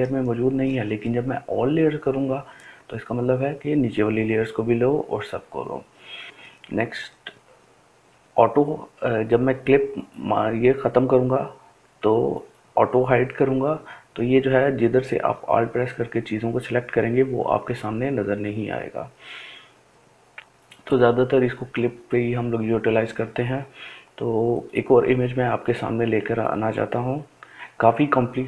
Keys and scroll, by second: 25.7 m.